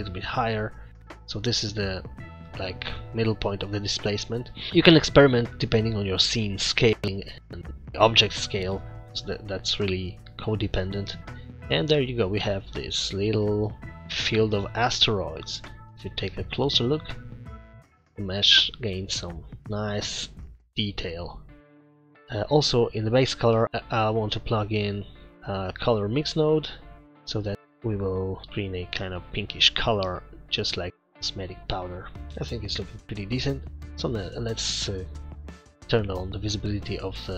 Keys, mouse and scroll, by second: 11.9-12.2 scroll up 5, 12.6-13.1 scroll down 5, 13.2 middle click, 13.9-14.3 scroll up 4, 14.9 scroll up 1, 15.3 middle click, 16.5 scroll up 1, 16.8 middle click, 18.8 scroll down 1, 19.6 scroll up 1, 20.2-21.6 middle click, 22.6 middle click, 23.0-23.6 scroll up 3, 23.6 click, 24.1 shift+a, 27.7 click, 27.7-28.4 scroll up 4, 28.4 middle click, 30.9 scroll down 3, 31.3 scroll down 2, 32.3-32.8 scroll down 5, 33.1 click, 33.6 middle click, 33.6 scroll down 1, 36.8 click.